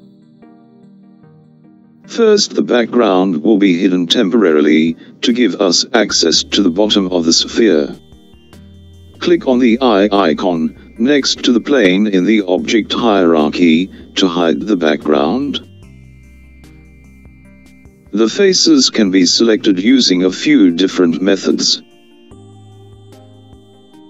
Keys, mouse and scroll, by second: 11.5 click, 16.4 click, 18.3-20.1 middle drag, 20.1-20.7 scroll up 2, 20.7-22.9 scroll up 1, 22.9-24.0 scroll down 1.